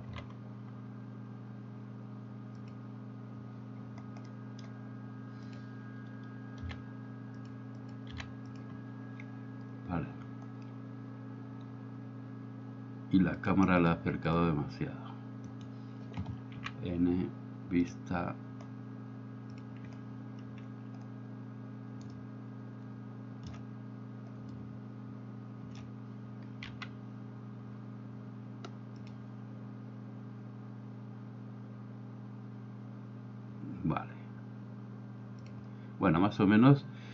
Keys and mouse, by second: 0.2 u, 4.6 middle click, 5.6-7.6 drag, 7.9 click, 13.4 click, 13.9-14.4 drag, 15.6 right click, 17.0 n, 19.6 click, 22.4-23.6 shift+middle drag, 24.7-25.8 shift+middle drag, 26.8 g.